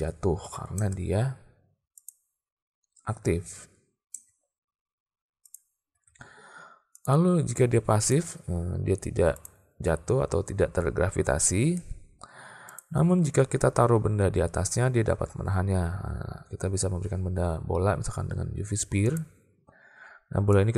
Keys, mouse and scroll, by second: 0.8 space, 4.2 space, 5.5 click, 6.0 alt+a, 7.1-8.2 drag, 9.4 click, 11.8 space, 12.8 click, 13.2 alt+a, 13.8 shift+a, 20.6-20.7 drag.